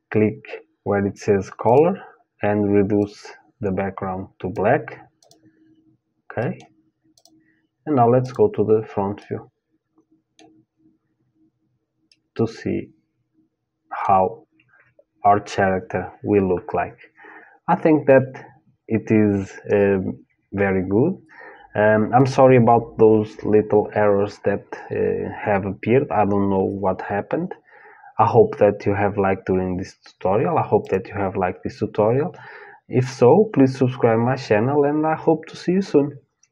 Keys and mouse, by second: 2.6 click, 4.8-9.9 drag, 6.0-7.8 middle drag, 8.8 middle click, 9.9-13.7 middle drag, 30.5-36.5 drag.